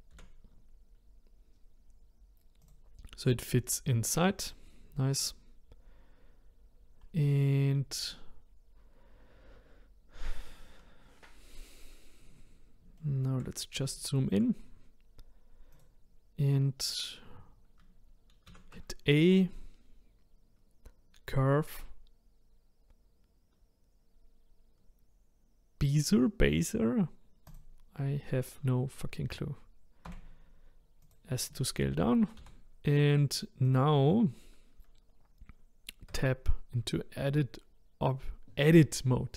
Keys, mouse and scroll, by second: 0.1 s, 4.4 click, 11.3-12.4 scroll up 4, 12.4-13.0 scroll down 1, 13.0-13.6 shift+middle drag, 13.6-13.9 scroll up 1, 13.9-14.6 shift+middle drag, 14.6-15.8 scroll down 1, 15.8 click, 18.5 shift+a, 30.1 s, 32.4 g, 36.1 Tab.